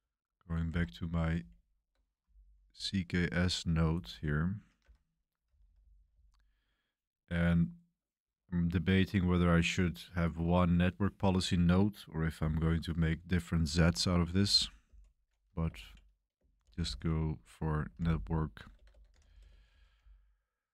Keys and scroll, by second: 0.7 Escape, 1.3 super+b, 2.5 super+b, 4.8 Escape, 5.4-6.0 typing, 14.0-20.7 typing.